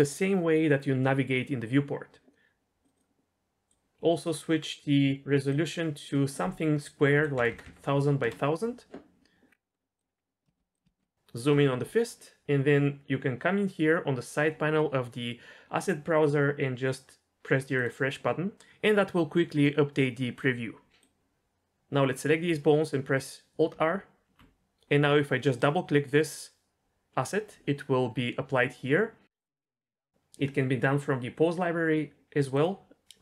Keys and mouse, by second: 2.8 click, 3.7 drag, 5.6-8.2 drag, 7.5 KP_0, 7.6 KP_0, 9.9 click, 10.5 shift+middle click, 10.7 middle click, 17.7 click, 21.0-22.2 drag, 23.7 alt+r, 32.5 click.